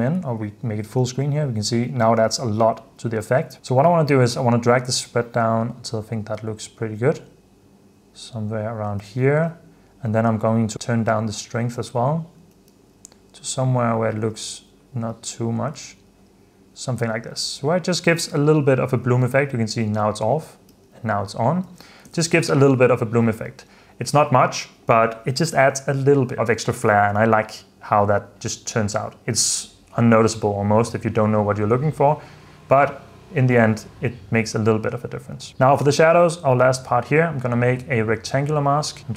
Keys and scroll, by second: 1.1 super+f, 1.2 super+d, 2.4 super+f, 3.4 super+d, 9.1 super+d, 12.5 super+d, 14.6 super+d, 16.1 super+d, 17.1 super+f, 17.6 super+d, 18.3 super+d, 19.0 super+d, 19.8 super+d, 21.0 super+d, 21.8 super+f, 22.2 super+s, 23.4 9.